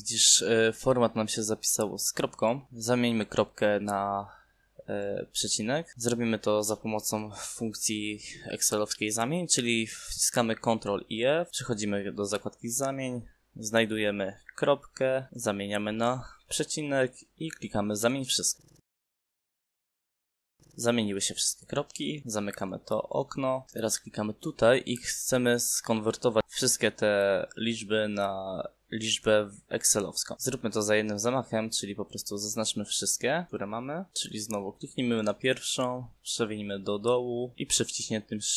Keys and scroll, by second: 13.4 ctrl+f, 18.6 /.